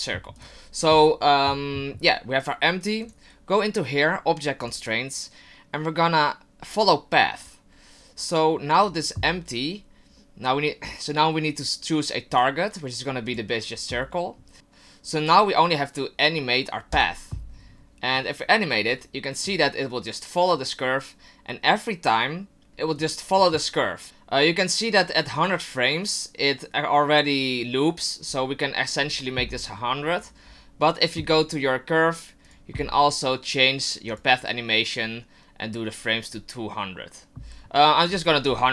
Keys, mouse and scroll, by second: 0.4 right click, 3.0 click, 4.6 click, 12.3 click, 16.9 click, 18.9 click, 22.7 ctrl+z, 23.0 click, 30.2 right click, 32.4 click, 34.1 click, 38.0 click.